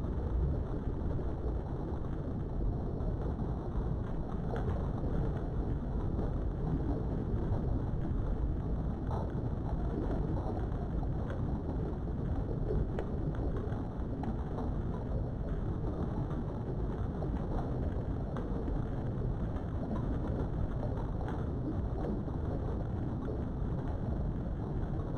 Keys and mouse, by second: 2.5 ctrl+z, 3.0 shift+click, 4.6 shift+click, 6.5 middle click, 7.8 shift+middle click, 8.7 shift+click, 9.0 shift+click, 9.4 shift+click, 10.1 shift+click, 11.4 shift+click, 12.0-13.1 middle drag, 14.0 middle click, 14.9 middle click, 16.2 shift+click, 17.1 middle click, 19.7 shift+click, 20.2 shift+click, 21.2 middle click, 22.0 shift+middle click, 23.6 shift+click, 23.9 shift+click, 24.3 shift+middle click.